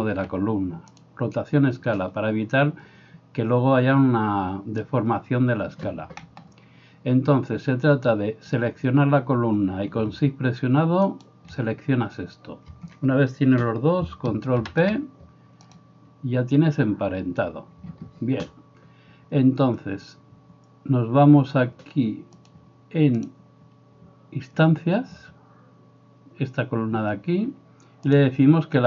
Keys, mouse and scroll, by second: 0.2 ctrl+a, 11.2 shift+middle click, 11.2 shift+right click, 14.6 ctrl+p, 22.6-23.3 middle drag, 23.3-28.2 drag, 28.2-28.8 middle drag.